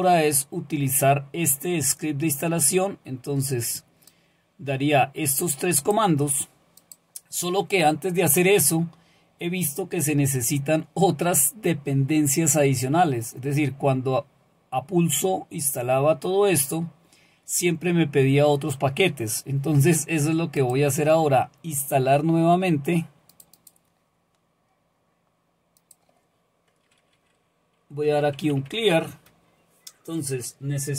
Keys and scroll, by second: 27.8-29.2 typing.